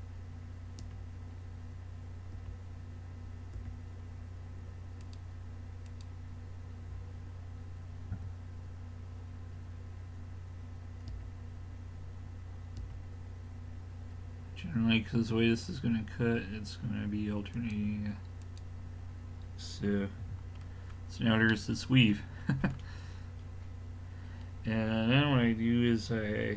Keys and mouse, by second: 0.8 l, 2.4 l, 3.6 l, 5.1-7.7 drag, 8.2 a, 11.1 l, 12.8 l, 17.6-20.4 drag, 20.2 a, 20.4-21.5 middle drag, 23.5 middle click.